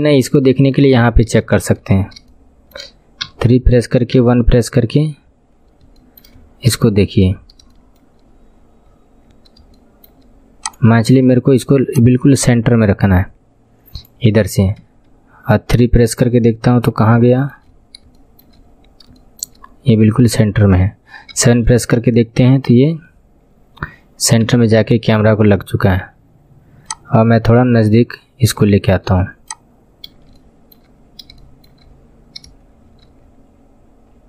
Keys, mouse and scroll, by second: 0.0 scroll up 5, 0.4 shift+middle click, 1.0-2.0 scroll up 11, 1.4 shift+middle click, 2.2-4.1 shift+middle drag, 4.1 KP_1, 4.6-5.6 scroll down 16, 6.0 shift+middle click, 6.4-6.8 scroll up 7, 6.8 shift+middle click, 7.4 scroll up 3, 7.8 shift+middle click, 8.2 scroll up 3, 8.5-8.8 scroll down 7, 8.8-9.3 scroll up 14, 9.8 shift+middle click, 10.7 click, 11.0 scroll down 5, 11.9 click, 14.8 KP_3, 15.4-16.4 scroll down 16, 16.9 scroll up 2, 17.2 shift+middle click, 17.6-18.1 scroll up 4, 18.1 shift+middle click, 18.6-19.2 scroll up 5, 19.2 shift+middle click, 19.6-20.4 scroll up 3, 20.4 scroll down 5, 21.3 KP_7, 21.9-22.6 scroll down 11, 22.6-24.4 scroll up 21, 24.4 KP_1, 24.6-26.3 scroll down 21, 28.1 scroll down 7, 28.7 shift+middle click, 30.0 KP_7, 30.3 shift+middle click, 31.0-31.4 scroll up 5, 31.4 shift+middle click, 31.8-32.7 scroll up 5, 32.7-34.0 scroll up 9, 34.0-34.2 scroll down 12.